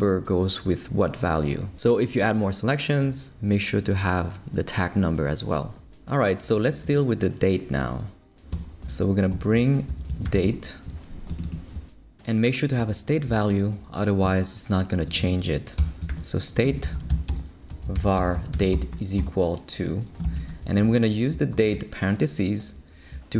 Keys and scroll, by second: 8.5 Return, 9.3 shift+super+l, 9.8-10.8 typing, 15.8 Return, 16.1-22.0 typing.